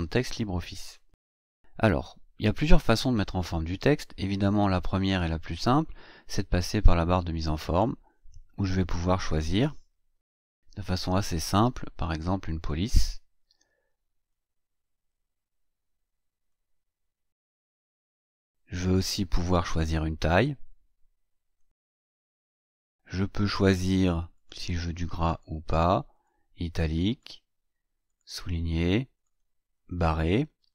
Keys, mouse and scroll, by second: 10.9 ctrl+a, 12.5 click, 14.3-16.7 drag, 17.7 click, 20.3 click, 21.6 click, 22.6-22.9 scroll up 1, 24.3 click, 25.2 click, 26.1 click, 27.1 click, 28.1 click, 29.1 click, 29.7 click, 30.6 click.